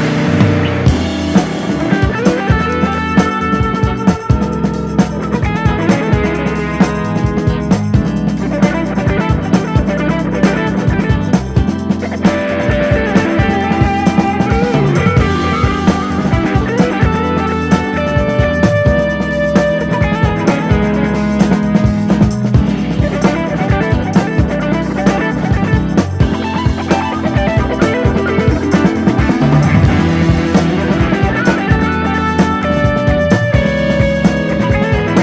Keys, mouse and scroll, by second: 0.0 middle click, 0.6 Tab, 0.9 drag, 1.0-1.3 scroll down 3, 1.3 click, 1.5-1.9 right drag, 1.9 drag, 2.1-2.5 scroll down 1, 2.5-3.3 middle drag, 3.3 /, 3.5-3.9 scroll down 1, 3.9 click, 4.3 click, 5.5 KP_7, 5.8-6.1 scroll down 1, 6.1-6.4 shift+middle drag, 6.4 g, 8.6-8.9 middle drag, 8.9 drag, 9.0 scroll up 1, 9.2-9.5 shift+middle drag, 9.5 click, 9.8 KP_1, 10.0-10.4 scroll up 2, 10.4 shift+middle click, 10.8 Tab, 11.1 scroll up 1, 11.3 shift+middle click, 11.6 scroll down 2, 11.8 KP_7, 12.4 shift+middle click, 12.9 click, 13.3 c, 15.5 scroll down 2, 15.6 middle click, 16.4 s, 17.3 KP_1, 17.6-18.0 scroll up 4, 18.3 click, 20.6 click, 20.8 scroll down 5, 21.1 middle click, 21.6 Tab, 21.9 click, 22.1 scroll down 4, 22.2-22.9 middle drag, 22.9 scroll up 2, 23.0 shift+middle click, 23.4 click, 23.9 Tab, 24.5 a, 24.9 s, 27.5 click, 27.8 scroll down 1, 27.9 middle click, 28.4 Tab, 28.5 click, 28.9 scroll up 4, 29.1-29.7 middle drag, 29.7 scroll down 3, 29.9 shift+middle click, 30.8 ctrl+s, 31.7 click, 32.3 Tab, 32.6 KP_7, 32.9 alt+/, 33.0 scroll up 2, 33.3 click, 33.7 shift+middle click, 34.5 shift+d.